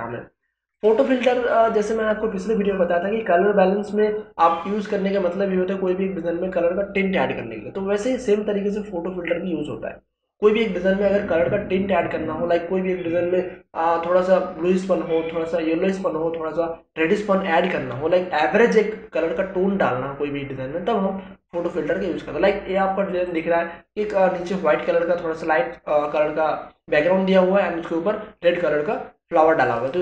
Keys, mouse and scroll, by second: 23.3 click, 29.8 click.